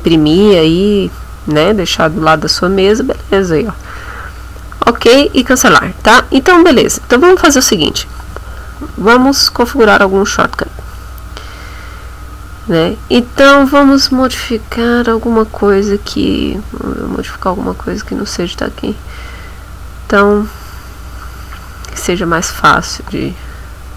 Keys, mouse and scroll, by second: 15.0-15.7 scroll down 4, 16.1-16.7 scroll down 2, 18.4 scroll down 2, 19.1-19.5 scroll down 2, 21.1-22.2 scroll up 4.